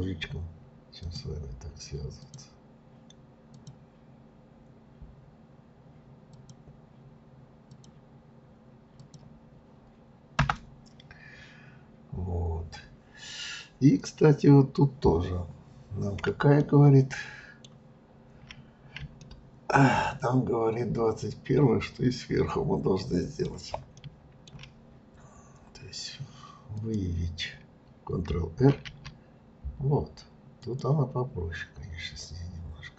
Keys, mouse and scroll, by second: 11.2 scroll up 2, 15.7 scroll down 3, 16.6-18.5 shift+middle drag, 18.5-19.2 scroll down 2, 19.2-22.2 shift+middle drag, 23.9 shift+middle click, 24.8-25.2 scroll up 1, 26.7 click, 28.7 ctrl+r.